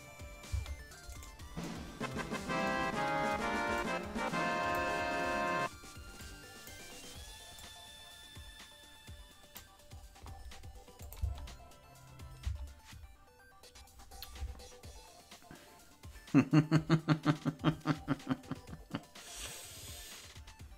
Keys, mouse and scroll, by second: 0.4 space, 1.4 right click, 3.7-4.8 drag, 6.1 click, 7.5-9.6 drag, 11.0-12.6 drag, 11.1 space, 12.4 space.